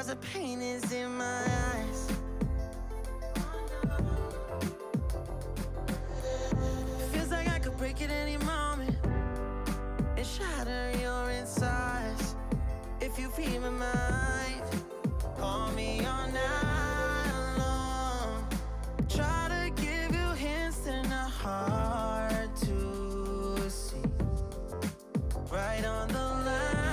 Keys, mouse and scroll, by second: 0.7-1.5 drag, 1.5 shift+middle click, 1.8-2.3 scroll up 5, 2.3 s, 4.9 click, 5.1 alt+z, 5.3-6.7 middle drag, 7.4 KP_3, 7.6 scroll up 2, 7.9 KP_1, 8.5 alt+z, 8.8 alt+z, 9.0 alt+z, 9.5 shift+middle click, 9.9 g, 12.3 click, 12.5-13.4 scroll down 8, 13.4-15.5 shift+middle drag, 15.5 scroll down 2, 15.6-16.5 middle drag, 16.5 KP_1, 16.9-18.2 drag, 18.2 x, 19.3-20.5 middle drag, 20.5-21.9 drag, 22.0 click, 22.3 alt+z, 22.5 drag, 22.7-23.5 middle drag, 23.5 scroll up 2, 23.8-25.1 middle drag, 25.1 Tab, 25.3 click, 25.5 middle click, 25.8 r.